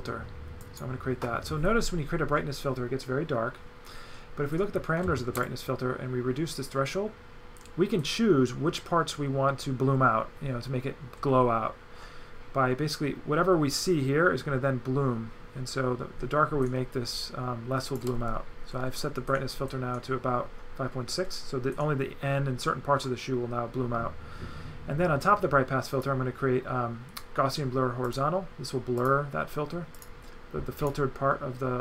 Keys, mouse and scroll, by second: 0.6 click, 5.5 shift+click, 25.9 click, 28.1 click, 29.1 click, 29.9 click, 30.8 click.